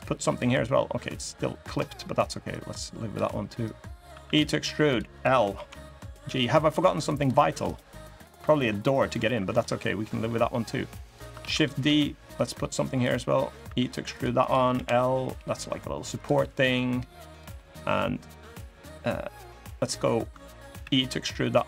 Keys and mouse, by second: 0.9 click, 2.2 click, 3.4 click, 3.8 e, 4.9 click, 5.3 l, 6.0 g, 8.0 middle click, 8.8 middle click, 9.3 middle click, 9.7 middle click, 10.4 middle click, 10.8 click, 11.1 shift+d, 11.6 s, 12.8 click, 13.4 e, 14.1 click, 14.5 l, 15.1 g, 16.3 click, 16.5 middle click, 17.0 click, 17.3 middle click, 20.5 e.